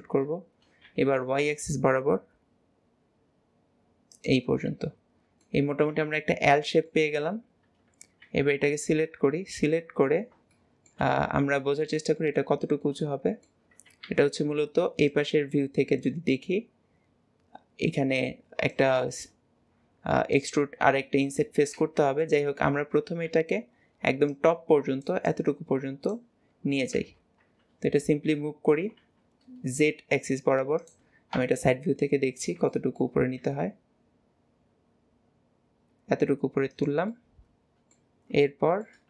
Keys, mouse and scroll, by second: 5.9 middle click, 9.2 KP_1, 10.1-10.5 scroll up 1, 10.5-22.0 shift+middle drag, 27.6-28.5 scroll down 2, 31.4 KP_3, 32.3 scroll up 2, 32.7 shift+middle click, 37.1 middle click, 37.8 middle click, 38.2 scroll down 1, 38.5 shift+middle click.